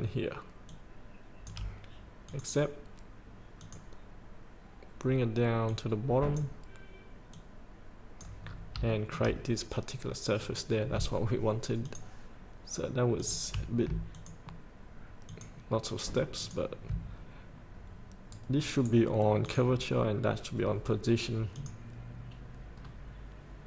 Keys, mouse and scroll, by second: 0.8 shift+click, 2.4 click, 8.7 scroll up 1, 9.1 shift+middle click, 10.6 click, 14.3 ctrl+click, 15.4 ctrl+click, 16.5 ctrl+click, 18.5 right click, 19.6 click, 22.9 scroll up 1.